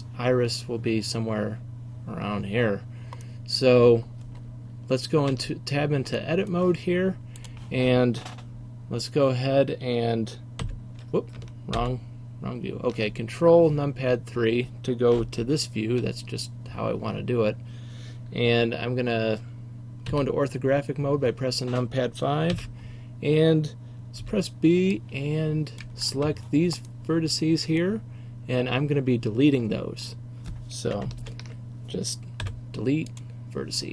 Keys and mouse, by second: 5.3 Tab, 8.8 click, 10.7 KP_3, 11.9 ctrl+KP_3, 15.5-16.1 ctrl+KP_6, 20.2 KP_5, 22.6 a, 24.3 b, 27.1 click, 31.3 ctrl+KP_3, 32.5 Delete.